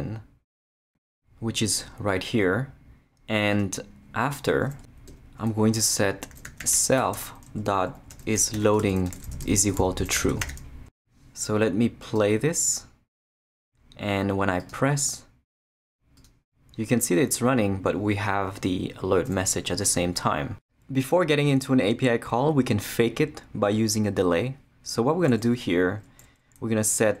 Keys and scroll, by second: 5.1 Return, 6.1-11.0 typing, 25.2 Return.